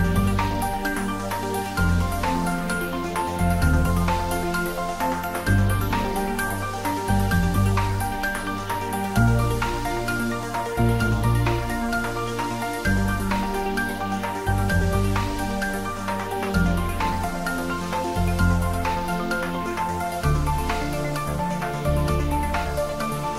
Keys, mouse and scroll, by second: 1.8 click, 6.5 click, 9.1 click, 10.0 3, 12.2 click, 15.0 click, 16.8 click, 19.7 click, 19.9 s, 20.6-21.7 ctrl+middle drag, 21.7 ctrl+s, 22.0-23.3 ctrl+middle drag.